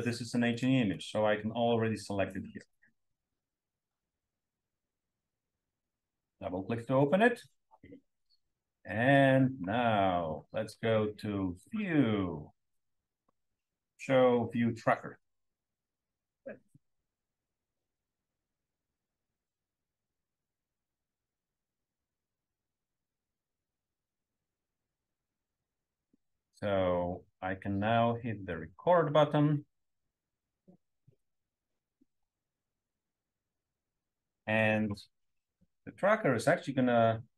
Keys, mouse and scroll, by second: 8.8 scroll up 2, 37.2 scroll up 1.